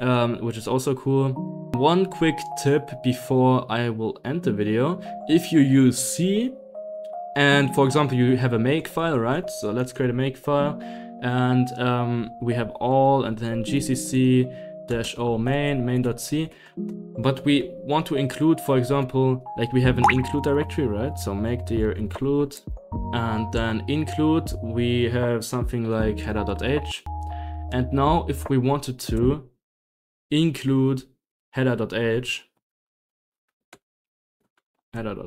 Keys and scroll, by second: 0.0-0.3 typing, 0.5 Escape, 1.7 ctrl+h, 1.7 ctrl+l, 6.7 ctrl+h, 7.9-23.4 typing, 24.4 Up, 25.9-28.9 typing, 28.2 Down, 28.3 Return, 28.7 Right, 28.9 Escape, 28.9 Right, 29.1 Page_Down, 29.9 Return, 30.6 Escape, 31.3 Up, 31.3-35.2 typing, 31.5 Up, 32.0 Up.